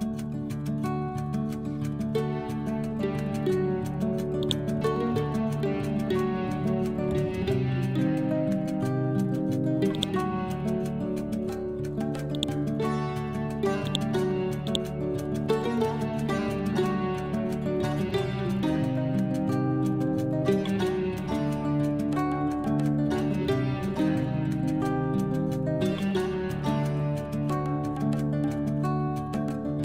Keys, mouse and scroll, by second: 0.3 BackSpace, 1.2 5, 1.4 Return, 2.6-3.2 scroll down 1, 4.3-6.9 drag, 6.6-7.8 typing, 7.8 ctrl+a, 9.8 click, 10.7 ctrl+a, 12.2 click, 15.7 Home, 15.8 Tab, 16.2 ctrl+a, 16.4 ctrl+Down, 18.0-19.9 typing, 21.1-27.9 typing.